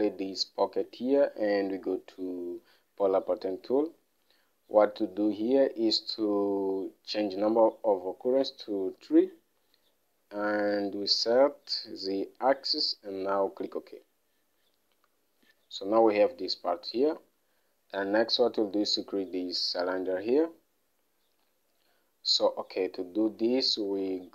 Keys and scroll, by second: 9.3 3, 16.0 Home, 17.6 alt+Tab.